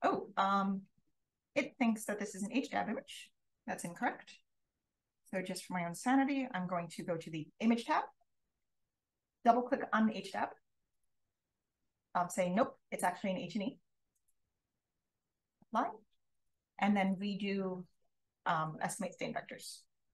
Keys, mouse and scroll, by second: 2.2 click, 3.8 click, 5.0 click, 12.4 click, 15.4 click, 19.5 click.